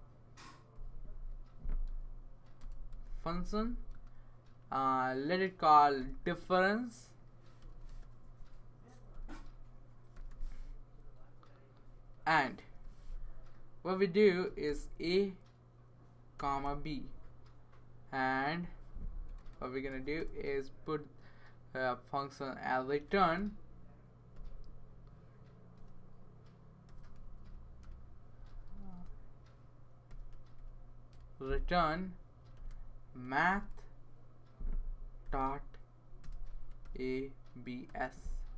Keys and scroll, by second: 0.7 Left, 0.9 Left, 1.0 Left, 1.2 Left, 1.8-3.4 typing, 5.5-10.6 typing, 12.6 shift+9, 13.8-15.1 typing, 16.4-17.1 typing, 19.4-20.2 typing, 22.5-24.3 typing, 25.7-31.1 typing, 32.5-37.9 typing.